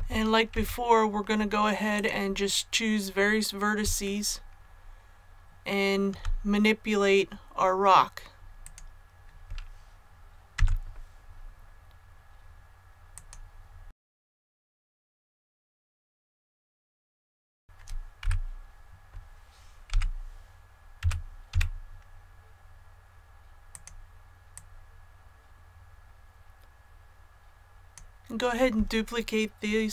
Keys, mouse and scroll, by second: 0.4 Tab, 1.9 click, 4.0-6.1 shift+middle drag, 5.3-6.1 scroll up 1, 8.6 right click, 10.5 g, 13.1 click, 13.8 middle click, 14.3 shift+right click, 14.7 g, 15.2 click, 15.3 middle click, 15.6 a, 15.9 right click, 16.1 g, 16.5 scroll up 1, 16.6-17.0 scroll down 1, 17.0 click, 18.2 KP_1, 19.8 l, 20.9 s, 21.4 z, 23.6 click, 24.9-27.9 drag.